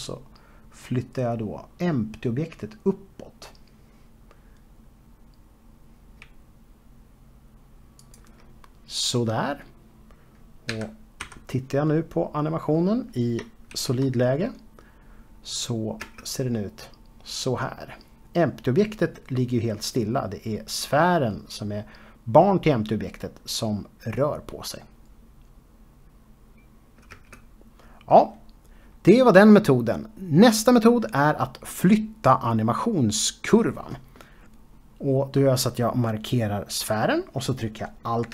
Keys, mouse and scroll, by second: 9.0 shift+click, 11.0-11.8 scroll down 2, 11.8 z, 13.0 middle click, 15.8-17.1 scroll down 2, 17.1 space, 28.2 space, 37.8 click.